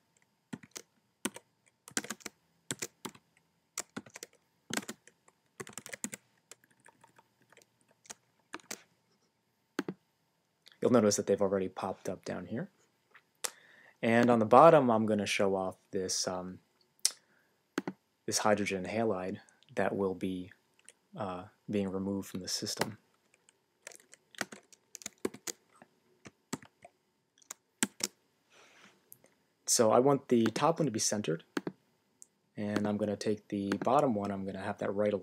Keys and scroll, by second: 0.5-4.4 typing, 5.6-6.5 typing, 6.6 Left, 7.7-8.4 typing, 8.5 shift+Left, 25.2 shift+h, 26.5 alt+-, 27.8 shift+x, 29.9 shift+x.